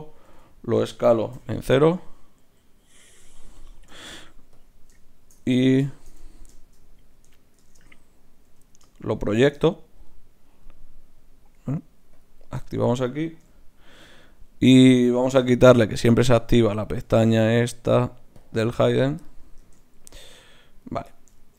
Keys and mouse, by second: 0.1 s, 4.5 click, 7.6 shift+Tab, 8.5 g, 12.1-15.4 drag, 13.5 KP_Divide, 15.4 n, 18.4-19.6 drag, 18.8 n, 19.6 ctrl+Tab, 20.8-21.5 right drag.